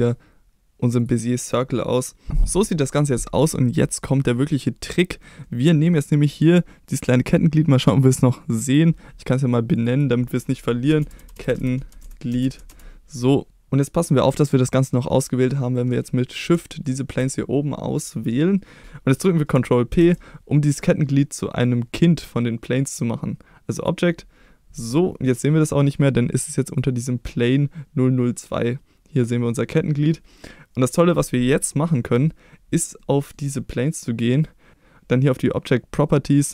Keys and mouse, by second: 4.1-5.2 middle drag, 5.4-5.9 middle drag, 8.6 click, 9.9-13.4 drag, 11.3 t, 16.8 shift+click, 18.8 ctrl+p, 26.7 click, 33.0 middle click.